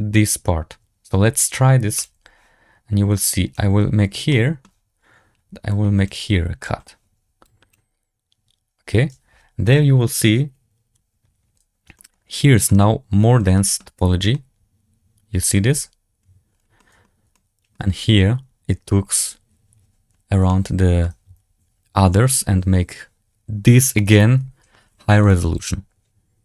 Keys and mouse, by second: 1.9 click, 3.1 middle click, 3.3 click, 3.4 middle click, 4.2 shift+middle click, 5.6 middle click, 7.4 click, 11.9 shift+middle drag, 12.6 shift+middle drag, 13.5 middle drag, 14.2-15.4 middle drag, 16.7 middle drag, 17.2-17.6 shift+middle drag, 20.4-20.9 shift+middle drag, 25.1-25.9 drag.